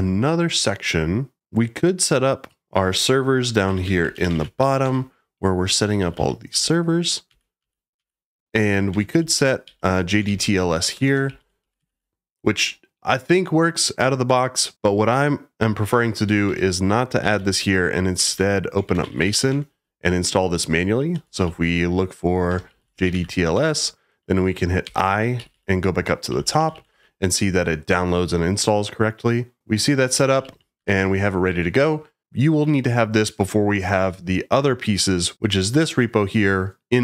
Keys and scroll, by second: 3.3-12.3 typing, 16.4 Escape, 17.2-19.7 typing, 21.1-23.6 typing, 24.8-26.8 typing, 29.9-31.3 typing, 31.4 Escape.